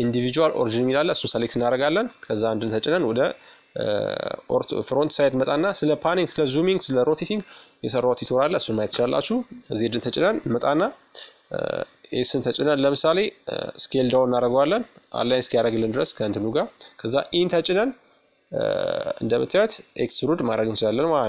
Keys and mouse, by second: 0.6-2.6 middle drag, 1.5 KP_1, 2.7-4.5 middle drag, 6.1 z, 14.8 e.